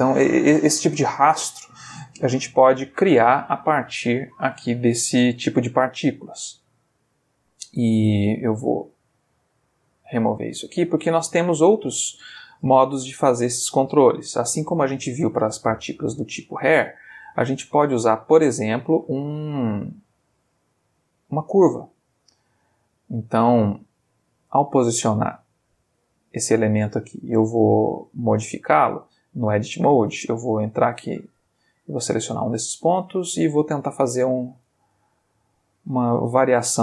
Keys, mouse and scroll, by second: 8.3 click, 9.1 x, 9.6 click, 11.2 Escape, 12.3-13.5 ctrl+middle drag, 14.1 shift+a, 21.7 click, 22.7-23.5 middle drag, 23.9 middle click, 24.8 g, 26.3 click, 26.5-27.0 middle drag, 28.0 click, 29.1-29.7 ctrl+middle drag, 29.7 ctrl+Tab, 30.2 ctrl+middle click, 30.8 ctrl+click, 31.4 ctrl+g, 32.4 click, 33.0 click, 33.4 g, 34.1 click, 34.6 click, 35.0 g, 35.8 click, 36.7 click.